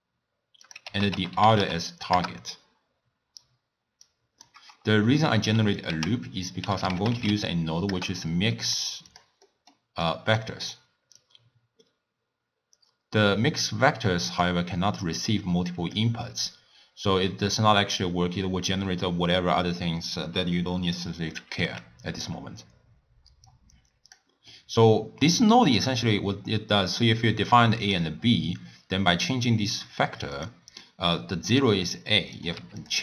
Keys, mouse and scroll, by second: 0.7-3.7 drag, 4.0-5.9 drag, 5.9 ctrl+a, 9.5-10.0 middle drag, 10.0-11.2 drag, 15.2 click, 21.8 x, 23.5 click, 24.5-25.4 middle drag, 25.4-30.1 drag, 30.4-31.6 drag, 32.4 click.